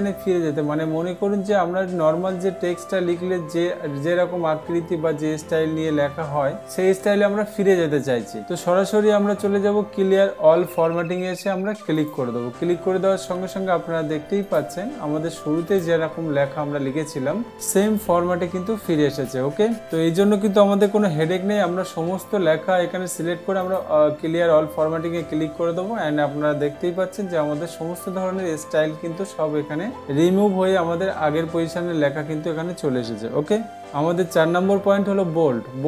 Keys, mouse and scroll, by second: 12.5-13.6 drag, 15.0-16.0 drag, 16.3 click, 19.7 click, 20.4 click, 21.6 ctrl+a, 24.2-25.2 drag.